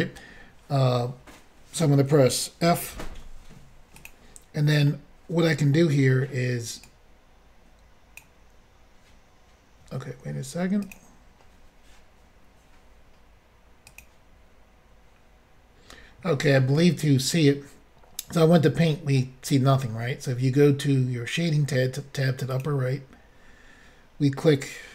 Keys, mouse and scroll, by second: 2.9 f, 4.0 click, 4.1 click, 4.9 middle click, 6.8 click, 10.8 click, 10.9 click, 13.9 click, 14.0 click, 22.5 click, 22.6 click.